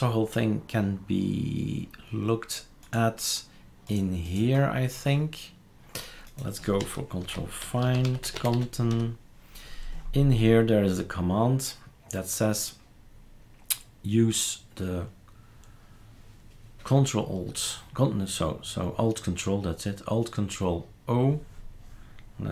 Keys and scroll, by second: 7.2 ctrl+f, 7.4-9.0 typing.